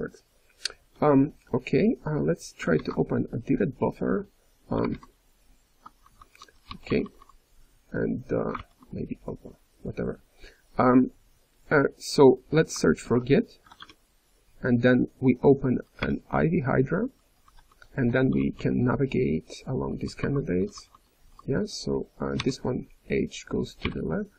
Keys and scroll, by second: 5.7-7.1 typing, 8.5 Return, 13.0 ctrl+s, 16.0 ctrl+o, 17.1-21.2 typing, 22.3 h, 23.8-24.3 typing.